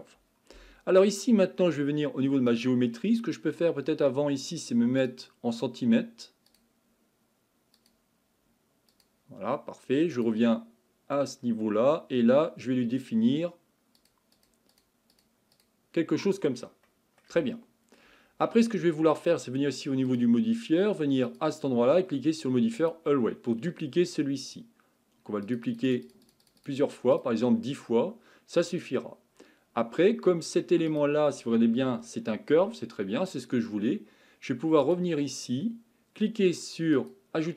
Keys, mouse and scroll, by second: 2.5-5.1 drag, 6.5-10.2 drag, 11.8-14.0 scroll down 3, 14.0-16.9 drag, 16.9-20.1 middle drag, 20.1 click, 21.3-27.9 drag, 27.9-28.5 scroll down 5, 28.5-28.9 scroll up 4, 30.9 click, 31.8 Tab, 32.6 Tab, 34.8 click, 37.0-37.5 drag.